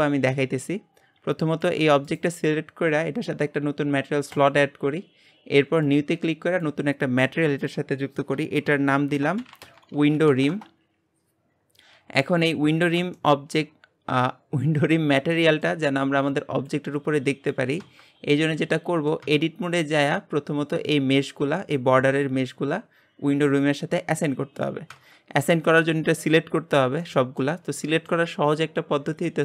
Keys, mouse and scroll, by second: 0.0 shift+middle click, 0.6-1.1 scroll down 2, 1.1-1.6 scroll up 2, 1.6 click, 1.8 g, 4.5-10.6 drag, 12.8-13.1 scroll up 2, 13.1 shift+middle click, 13.8-15.3 scroll up 1, 15.3-19.2 shift+middle drag, 19.2 Tab, 19.5-22.5 scroll down 2, 26.5-26.9 scroll up 1, 27.1-29.4 shift+middle drag.